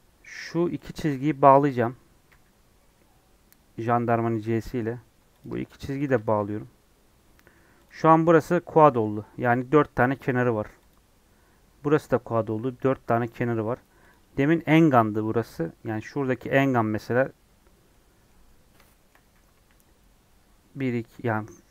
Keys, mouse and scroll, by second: 2.2 j, 4.6 middle click, 5.3 click, 6.3 j, 6.8 scroll down 1, 7.5 3, 7.8 click, 8.7-10.8 middle drag, 10.8 click, 14.0 click, 15.5 scroll down 1, 15.6-19.5 middle drag, 19.5 1.